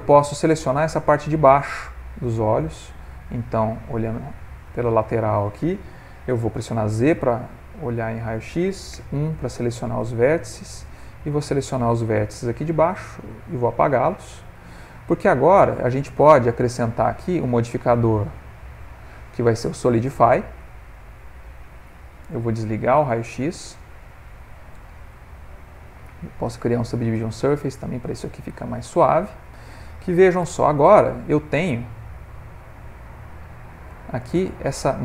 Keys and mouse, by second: 1.6 middle click, 2.8 middle click, 4.0 click, 4.8 ctrl+middle click, 5.0 ctrl+middle click, 6.7 z, 8.9 1, 10.4 click, 12.2 x, 13.2 middle click, 15.3 Tab, 17.4 click, 18.5 click, 20.9 middle click, 22.4 z, 23.7 middle click, 26.0 click, 27.8 middle click, 27.9 middle click, 30.4 /.